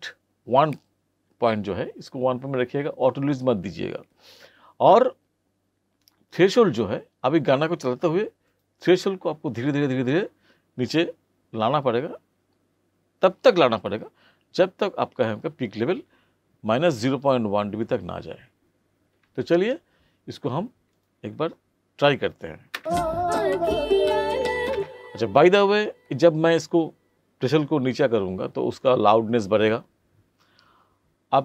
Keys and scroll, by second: 22.7 space, 24.7 space.